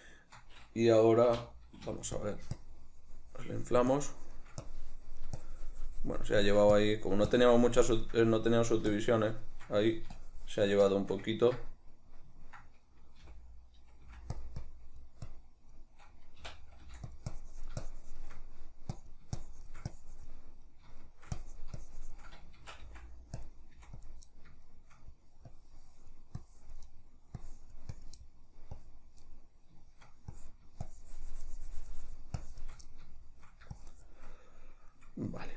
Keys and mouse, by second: 2.8-11.1 drag, 11.1-14.6 shift+middle drag, 13.4 g, 14.8-17.3 drag, 16.6 i, 17.0 f, 17.6-18.6 drag, 18.6 middle click, 19.2-20.8 drag, 20.8 middle click, 21.6-23.6 drag, 22.7 shift+c, 23.9 f, 24.2 click, 24.8 shift+middle click, 25.6-27.0 drag, 27.0 middle click, 27.5 click, 28.3 middle click, 28.9 click, 29.4-30.5 middle drag, 30.5-33.0 drag, 33.0 middle click, 33.9-35.5 shift+drag.